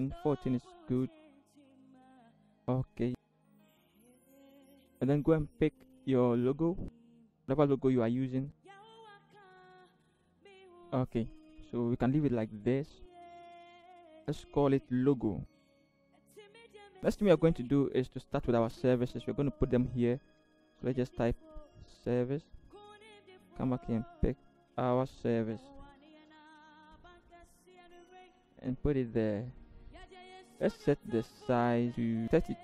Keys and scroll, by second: 3.2 v, 9.2 alt+shift+Return, 9.3 alt+shift+v, 9.7 ctrl+=, 9.9 ctrl+=, 10.3 Right, 10.3 Right, 15.1 ctrl+g, 16.0-16.4 typing, 20.9 t, 25.7 ctrl+c, 28.3 ctrl+v.